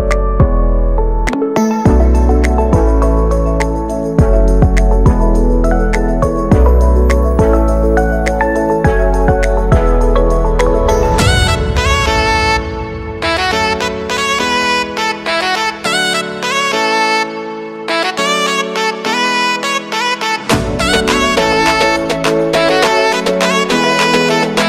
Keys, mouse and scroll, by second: 4.6 [, 5.3 space, 9.3 click, 11.4 space, 13.6 click, 14.3 space, 18.0 click, 23.1 space.